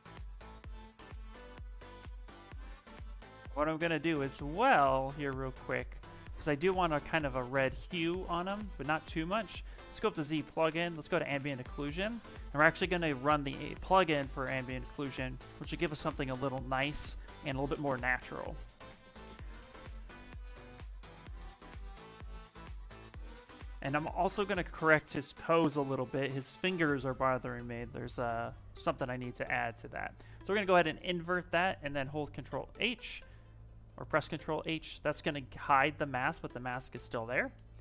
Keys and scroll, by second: 32.2 ctrl+h, 35.3 s, 36.7 ctrl+h, 37.0 ctrl+h.